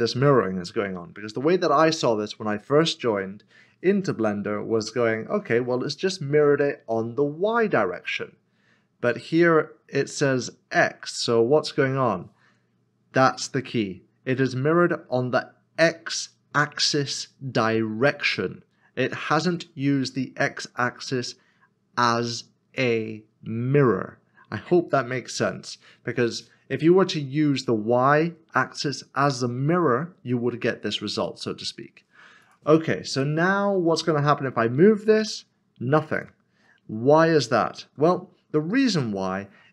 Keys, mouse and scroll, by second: 2.5 middle click, 32.4 click, 34.2 click, 35.1 scroll down 1, 36.1 click, 38.0 ctrl+z.